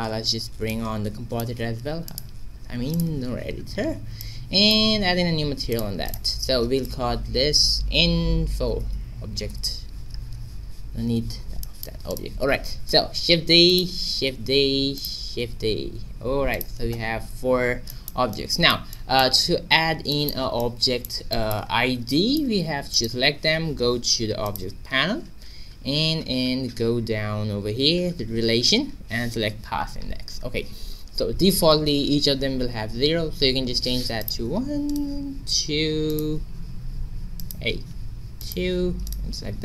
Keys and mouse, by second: 0.8 click, 2.2-4.2 drag, 4.2 middle click, 5.7-7.3 drag, 8.1 i, 12.1-13.6 middle drag, 12.7 shift+d, 13.6 right click, 14.1 shift+d, 15.2 shift+d, 17.3-22.9 middle drag, 22.9-24.8 right drag, 24.4-26.4 drag, 26.4-34.0 middle drag, 34.2-35.9 drag, 34.9-39.6 right drag, 36.4 click, 39.0-39.6 drag.